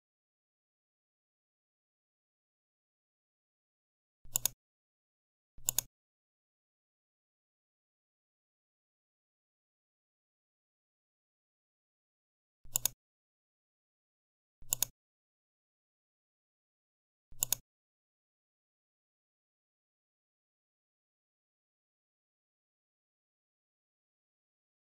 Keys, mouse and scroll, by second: 4.2 click, 5.6 click, 12.6 click, 14.6 click, 17.3 click.